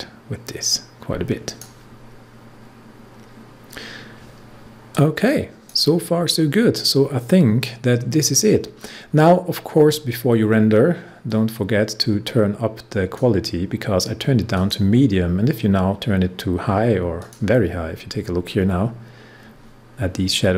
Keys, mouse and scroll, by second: 4.9-8.2 drag, 11.3-14.5 drag, 18.3-18.9 scroll up 1.